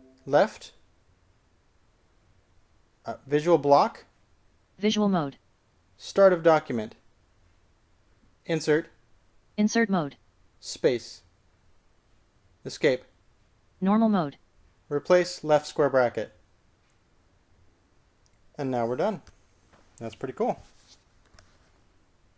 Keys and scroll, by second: 1.4 h, 4.9 ctrl+v, 7.7 typing, 9.7 shift+i, 12.1 space, 13.9 Escape, 17.2 typing.